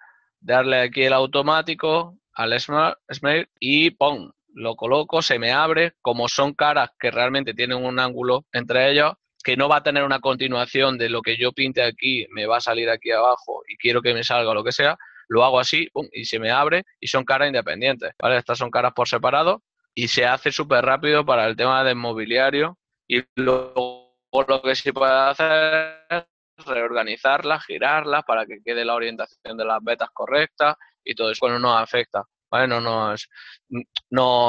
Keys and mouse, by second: 1.1 u, 5.5 middle click, 6.3 ctrl+middle click, 10.6 ctrl+middle click, 13.9 d, 17.5 right click, 20.2 l, 21.2 right click, 21.9 ctrl+middle click, 26.2 shift+middle click, 30.1 right click.